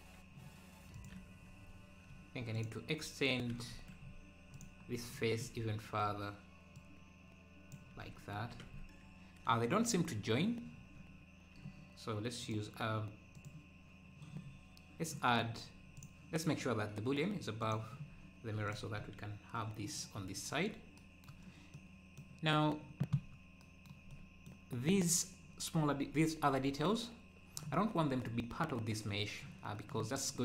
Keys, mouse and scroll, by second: 0.9 click, 2.5 click, 4.1-4.6 scroll up 2, 4.6 click, 4.9 scroll down 2, 6.8-7.9 drag, 8.3-8.7 scroll down 1, 8.7 Tab, 10.0 scroll up 1, 10.8 scroll down 1, 12.4-14.4 drag, 16.0-18.1 drag, 18.7 click, 19.0-19.7 scroll up 3, 20.3-20.7 scroll down 2, 20.9 scroll down 1, 21.7 middle click, 22.5 scroll down 1, 24.1 middle click, 24.1-24.7 scroll up 1, 27.8 scroll up 2.